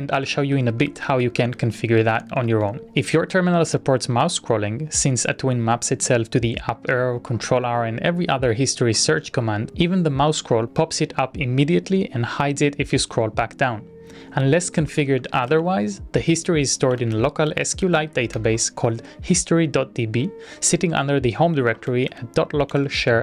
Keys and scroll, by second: 2.8 z, 14.2-18.6 typing, 21.3-22.4 typing, 22.8 ctrl+e.